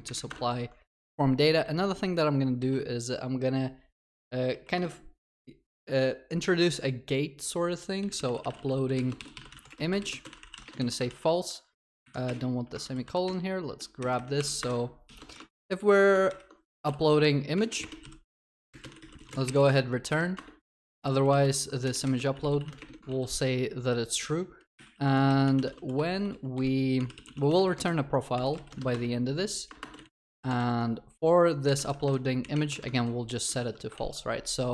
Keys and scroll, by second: 0.3 Return, 11.2 ctrl+s, 12.8 ctrl+w, 13.0 ctrl+c, 15.6 ctrl+v, 21.5 ctrl+v, 25.0 ctrl+s, 30.6 ctrl+v, 32.9 ctrl+v, 33.5 ctrl+alt+shift+l.